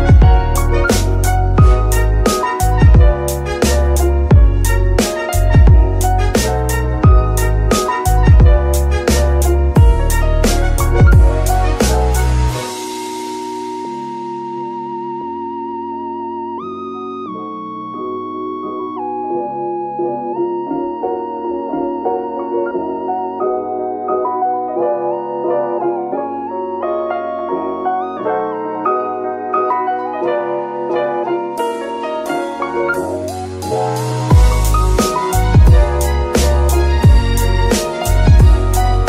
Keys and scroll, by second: 1.7 ctrl+Tab, 4.5 z, 8.7 ctrl+shift+s, 13.3 Escape, 14.6 Escape, 18.5 Escape, 19.7 Escape, 35.6 r, 36.2 Escape.